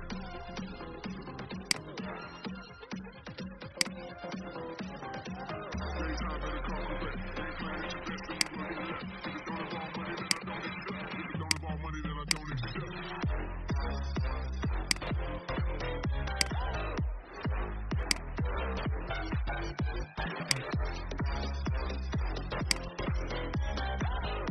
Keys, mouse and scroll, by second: 1.5-3.4 drag, 5.9 ctrl+c, 6.7 ctrl+f, 8.2 right click, 10.2-17.6 drag, 19.5 Delete, 20.4 click, 21.8 ctrl+c, 22.5 click, 23.5 ctrl+f.